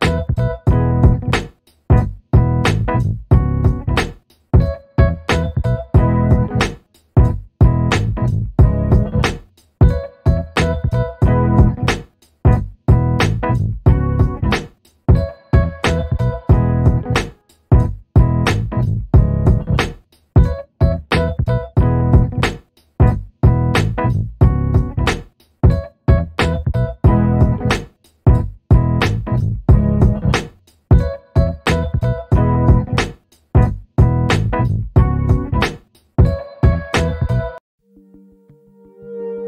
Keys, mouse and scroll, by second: 0.9 alt+middle click, 1.9 click, 3.7 alt+middle click, 4.0-4.4 alt+scroll up 2, 4.4 alt+middle click, 6.2 click, 6.7 double click, 7.8 click, 8.1 double click, 8.7 click, 9.4 right click, 10.0 click, 14.5 click, 14.9 alt+middle click, 15.7 click, 16.7 click, 16.7 alt+middle click, 17.4 click, 20.0 right click, 20.4 click, 22.8 alt+middle click, 23.8 click, 25.3 scroll down 1, 25.6 alt+middle click, 26.0 shift+click, 27.0 right click, 27.7 click, 32.3 click, 32.6 double click, 33.3 alt+middle click, 33.8 alt+scroll up 2, 34.1 alt+middle click.